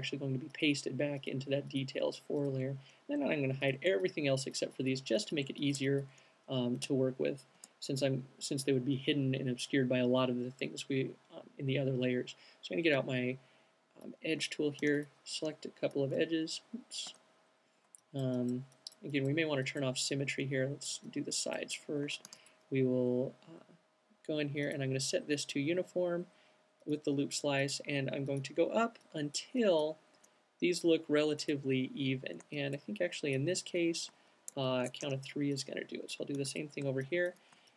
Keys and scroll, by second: 6.6 space, 14.9 alt+c, 15.9 alt+super+c, 16.1 z, 17.2 q, 22.3 alt+c, 35.1 alt+shift+q, 35.6 alt+shift+c.